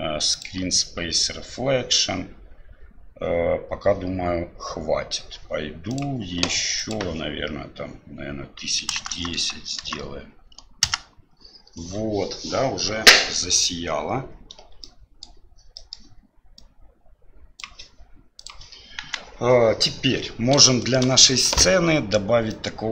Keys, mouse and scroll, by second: 0.4 click, 5.9 click, 6.8-11.6 drag, 9.1 KP_0, 14.8-15.2 middle drag, 15.8 middle click, 16.6-17.7 drag, 18.4 click, 19.0 KP_1, 20.7 middle drag, 22.6-22.9 drag.